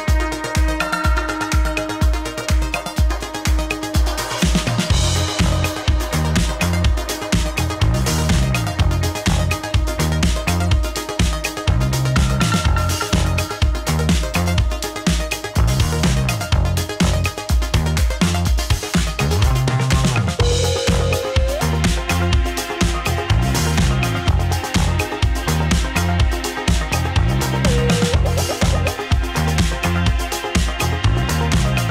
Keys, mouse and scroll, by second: 0.3 click, 1.6 click, 2.2 middle click, 3.4 click, 4.4 middle click, 5.2 click, 5.3 right click, 5.8 click, 6.3 ctrl+s, 6.9-7.8 middle drag, 9.7-10.2 shift+middle drag, 10.2 scroll down 1, 10.4-11.2 middle drag, 11.2 shift+a, 12.8 click, 13.3 click, 13.7 middle click, 14.2 click, 14.6 click, 14.9-15.9 middle drag, 15.9 KP_0, 16.8 click, 17.9 drag, 18.4 click, 18.6 click, 18.8-19.7 scroll down 5, 19.7-21.3 shift+middle drag, 21.5-22.5 shift+middle drag, 22.6 middle click, 22.9-23.2 scroll down 1, 23.2-25.3 shift+middle drag, 25.4-26.4 scroll up 1, 26.5 click, 27.9 click, 30.1 click, 31.3-31.9 drag.